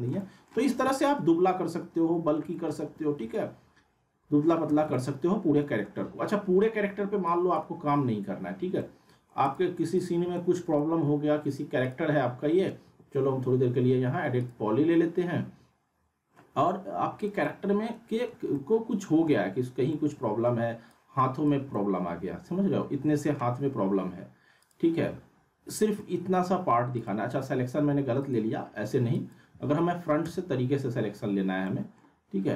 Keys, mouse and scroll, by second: 0.7 scroll up 1, 0.9-2.4 alt+middle drag, 2.5-4.6 alt+middle drag, 4.7 z, 4.9-5.8 alt+middle drag, 7.3 click, 8.4-8.7 scroll up 1, 8.8-9.4 alt+middle click, 9.4 click, 10.3-11.3 alt+middle drag, 11.8 click, 12.8 e, 14.4 click, 17.4 alt+Num_Lock, 17.4 click, 17.4-18.4 alt+middle drag, 19.5-19.9 scroll up 1, 19.9-20.5 alt+middle click, 20.9-21.5 click, 21.7-23.6 alt+middle drag, 24.6 click, 26.0-26.6 alt+middle click, 26.4 alt+w, 26.9 click, 28.2 click, 29.6 alt+w, 30.2 z, 30.9 scroll up 1, 31.7 middle click.